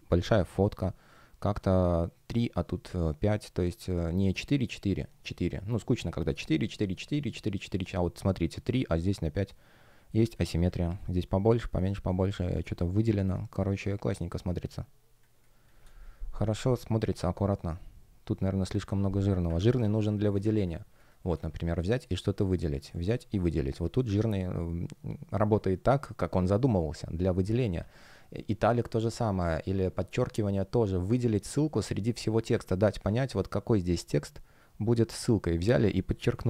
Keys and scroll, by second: 9.2 shift+g, 10.0 space, 12.0 space, 19.9 space, 36.2 super+u.